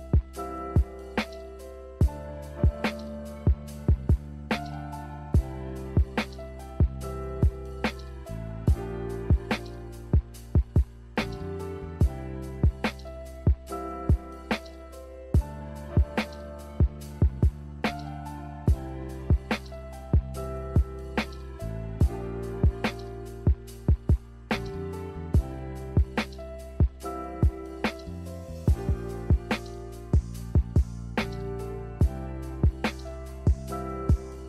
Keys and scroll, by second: 5.7 z, 8.4 1, 14.3 z, 17.4 n, 18.7 a, 21.6 z.